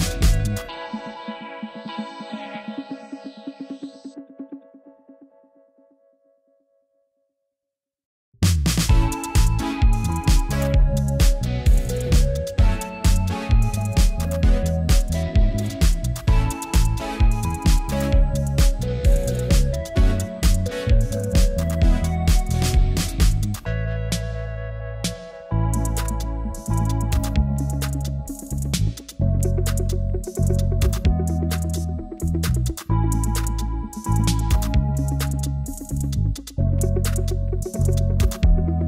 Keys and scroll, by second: 16.0 e, 26.5 super+m, 35.2 b.